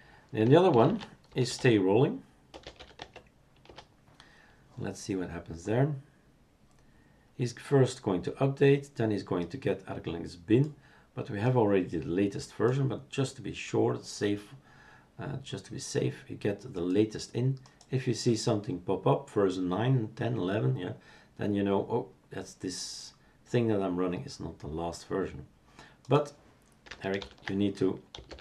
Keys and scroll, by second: 2.9 Tab, 2.9 typing, 3.6 Return, 27.2 ctrl+alt+t, 27.9-28.4 typing.